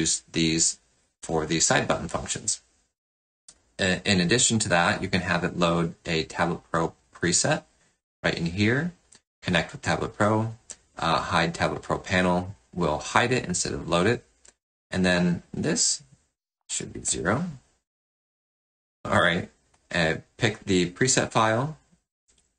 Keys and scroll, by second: 16.6 BackSpace.